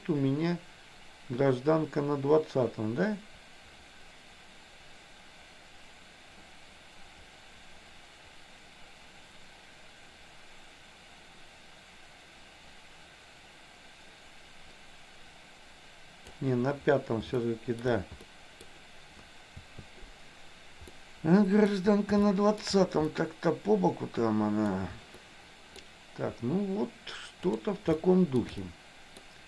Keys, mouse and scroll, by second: 0.0-16.5 drag, 17.4 shift+middle click, 18.2 middle click, 19.6 a, 21.0 middle click, 22.4 shift+middle click, 23.3-24.9 middle drag, 25.2 middle click, 27.5 click, 28.0 shift+middle click, 28.8 middle click.